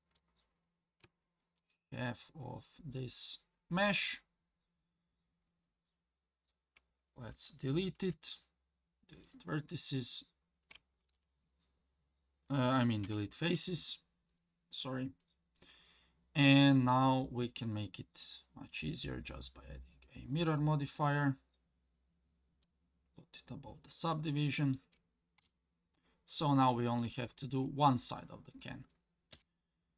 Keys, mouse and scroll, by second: 1.6-3.5 shift+drag, 4.2-4.7 scroll up 3, 4.9-7.5 scroll down 2, 7.9 x, 11.0 ctrl+z, 13.0 x, 15.2-16.9 middle drag, 18.2 click, 18.9-21.2 drag, 22.6 click, 24.3 middle click, 25.4 KP_7, 26.3-26.6 scroll up 3, 27.1 shift+middle click, 28.3 scroll down 1, 29.3 KP_1.